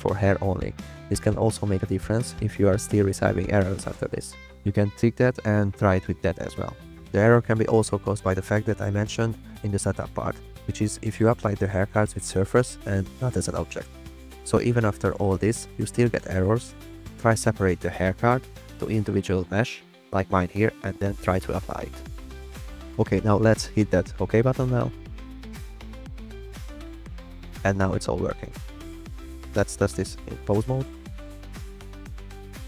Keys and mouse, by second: 31.6-32.0 drag, 32.6 click.